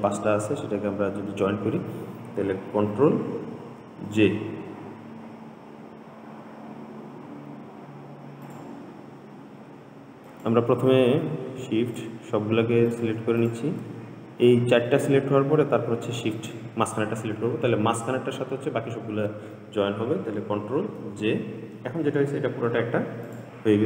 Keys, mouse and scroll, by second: 4.0 ctrl+j, 8.7 click, 10.5 click, 12.1 shift+click, 13.1 shift+click, 13.6 shift+click, 16.6 shift+click, 21.2 ctrl+j, 23.5 click.